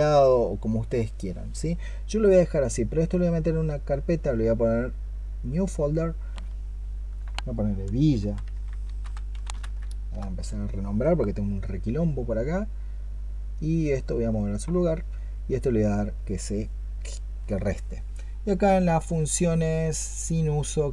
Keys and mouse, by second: 8.0-9.7 typing, 9.9 Return.